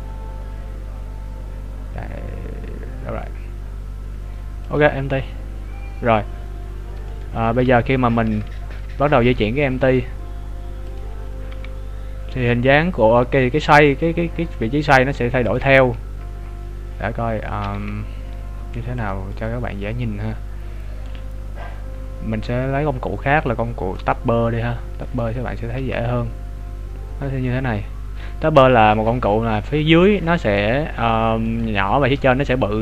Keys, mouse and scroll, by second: 7.1 right click, 7.6 Tab, 9.2-10.3 scroll down 4, 10.9 click, 11.5 g, 19.4 right click, 20.1-21.0 scroll down 6, 24.1 click, 25.1 right click, 25.8 g, 31.5 right click.